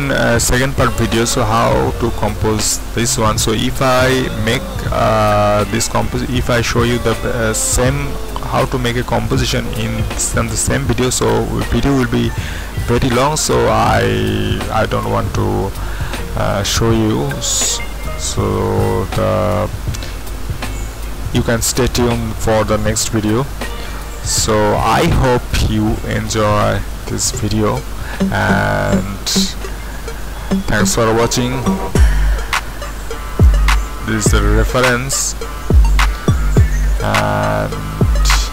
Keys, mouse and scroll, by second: 16.0 click, 16.2-19.5 middle drag, 19.5-24.8 scroll up 1, 24.8-31.7 middle drag, 31.7 click, 33.1-33.8 scroll down 2, 33.8-35.5 scroll up 2, 35.5-36.2 scroll down 2, 37.0-38.2 drag, 38.2-38.5 right drag.